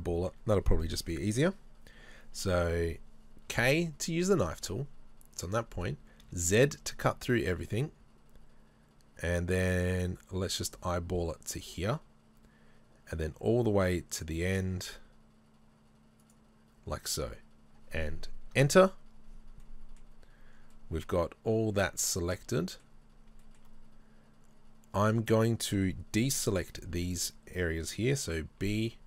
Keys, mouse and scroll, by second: 3.5-18.6 middle drag, 3.5 k, 18.6 KP_Enter, 19.6 middle click, 20.0-20.7 scroll down 1, 20.8 middle click, 23.0 middle click, 23.1-23.4 scroll up 1, 23.4 shift+middle click, 28.6 b.